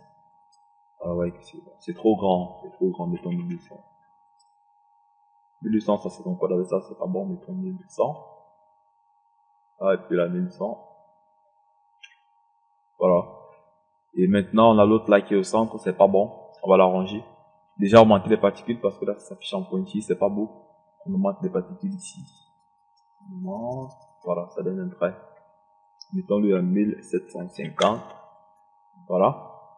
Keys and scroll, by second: 0.1 0, 3.3 KP_1, 3.6 KP_2, 4.1 KP_0, 7.6 KP_1, 10.4 KP_1, 10.6 KP_0, 12.8 KP_1, 27.2 KP_1, 27.6 KP_7, 27.8 KP_5, 28.1 KP_0.